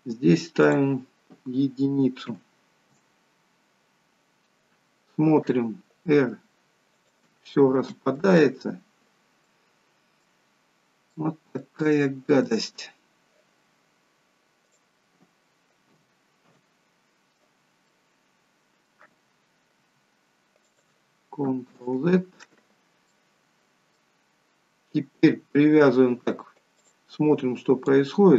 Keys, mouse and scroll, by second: 0.5 click, 6.1 r, 8.3 ctrl+z, 9.4 middle click, 10.4-11.0 scroll up 3, 11.0 middle click, 11.9 shift+middle click, 12.9-13.7 scroll down 1, 14.1-14.6 scroll down 1, 14.6 click, 19.8 r, 21.8 ctrl+z, 23.0 middle click, 24.3-24.6 scroll up 2, 25.6-26.0 scroll down 1, 26.8 click, 27.8 click.